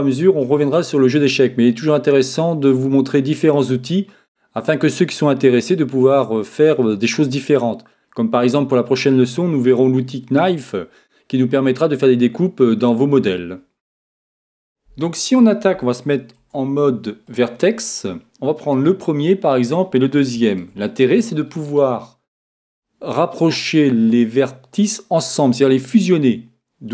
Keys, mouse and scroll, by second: 16.3 ctrl+Tab, 18.6-22.2 right drag.